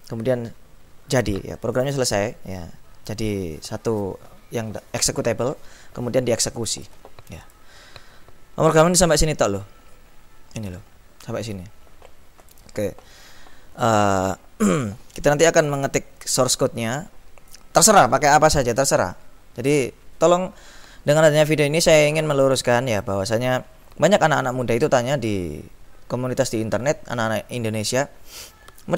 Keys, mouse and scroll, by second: 1.7 click, 6.7 click, 7.6 click, 9.2-11.9 drag, 12.5 click.